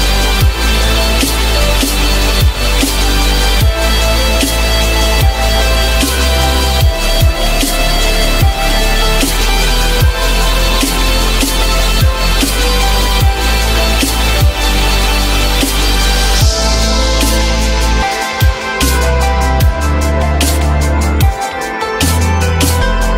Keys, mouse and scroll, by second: 9.9 F9, 18.8 shift+click, 19.7 Delete.